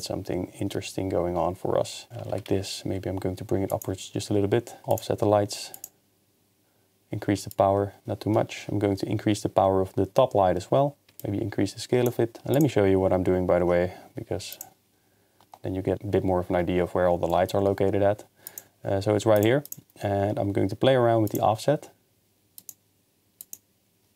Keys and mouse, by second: 2.9 g, 2.9 z, 3.7 click, 5.8 click, 7.5 shift+click, 11.3 shift+click, 14.5 click, 18.5 click, 19.4 click, 21.3 click, 22.6 click, 23.4 click.